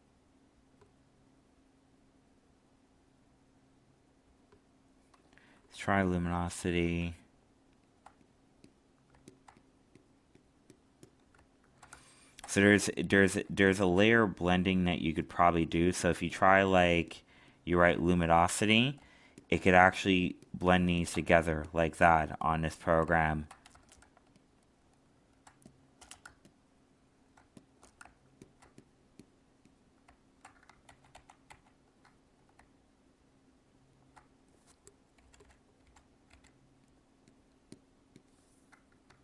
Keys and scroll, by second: 24.0 alt+space, 30.8 ctrl+z.